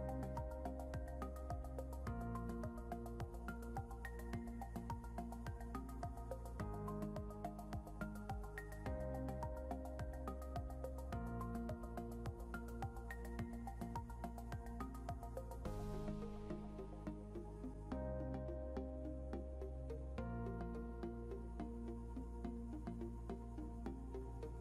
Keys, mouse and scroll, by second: 19.9 Down, 23.8 scroll up 1.